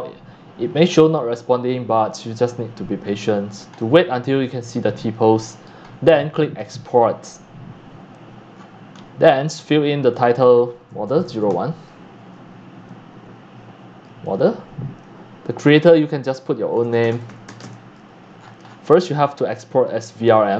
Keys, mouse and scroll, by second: 3.0-4.4 middle drag, 3.0-3.7 scroll, 3.2 click, 4.4 shift+drag, 4.7-5.6 shift+middle drag, 5.6 click, 5.8-6.7 scroll up 5, 6.7-8.5 drag, 8.5-9.1 scroll down 9, 10.2 click, 10.8-11.9 typing, 14.2 click, 16.6-18.1 typing, 18.2-18.7 scroll down 19, 19.8 click.